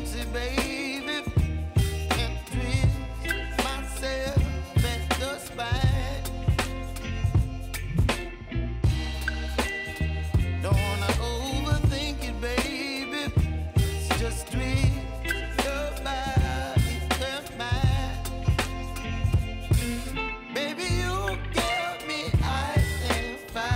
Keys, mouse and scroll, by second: 2.5 space, 4.2 click, 5.8 r, 6.5 click, 6.9-8.1 typing, 9.1 click, 9.8 Return, 10.6 click, 11.0 space, 13.2 j, 14.9 click, 15.2 -, 16.2 \, 18.4 k, 19.9 click, 20.7 Return, 21.9 k, 22.7 click.